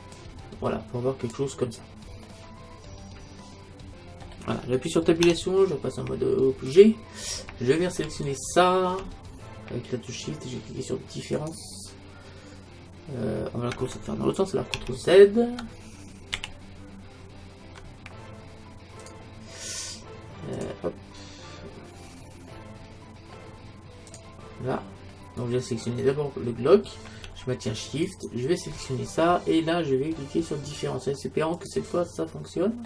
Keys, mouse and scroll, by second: 0.2-2.1 drag, 2.1-4.3 middle drag, 5.2 Tab, 8.3-10.1 right drag, 11.4-13.3 drag, 14.8 ctrl+Tab, 16.5 ctrl+z, 19.0-22.4 drag, 21.5-24.1 middle drag, 24.1-26.0 drag, 25.8-27.7 right drag, 28.1-30.0 right drag, 30.3-31.6 middle drag, 31.6-32.8 drag.